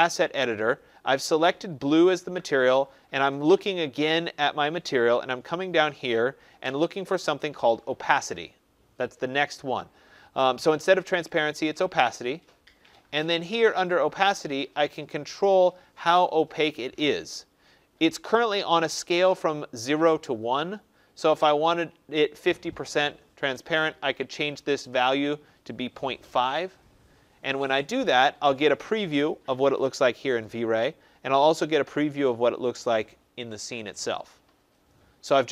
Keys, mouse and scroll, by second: 11.2-16.4 drag, 21.7-23.6 drag, 23.3-24.4 typing, 26.3 Tab.